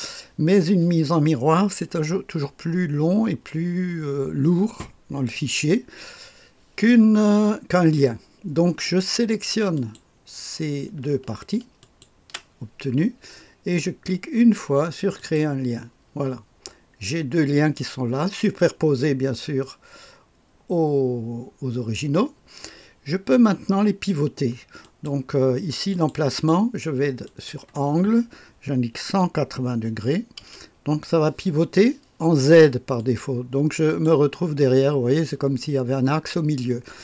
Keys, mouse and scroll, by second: 9.7 click, 11.8 ctrl+click, 15.2 click, 24.8 click, 25.9-27.2 drag, 27.3 click, 29.1 KP_1, 29.9 KP_8, 30.4 KP_0, 33.0-34.0 drag.